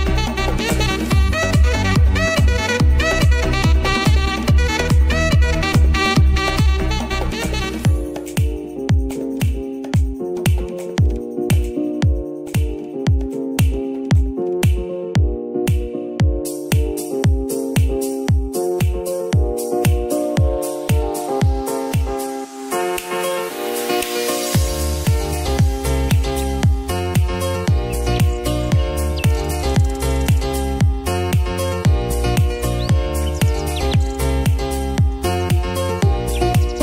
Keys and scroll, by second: 6.1 ctrl+z, 15.2 ctrl+s, 19.9 space.